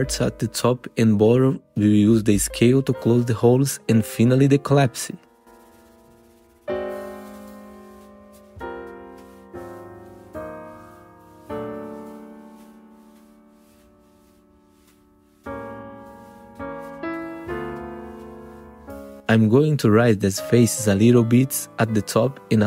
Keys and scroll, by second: 0.8 F3, 1.6 r, 3.2 w, 3.4 F3, 4.1 F3, 5.7 r, 9.0 F3, 9.5 2, 9.6 F4, 10.7 f, 11.5 F3, 12.2 F3, 13.8 4, 14.9 1, 15.5 w, 19.5 F3, 20.5 F3, 21.0 1.